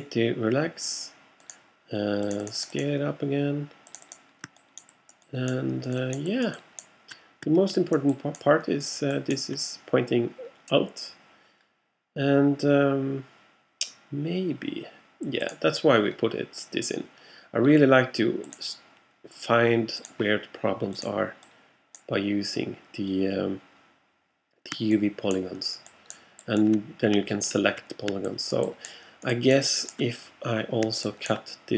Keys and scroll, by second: 27.4 alt+x.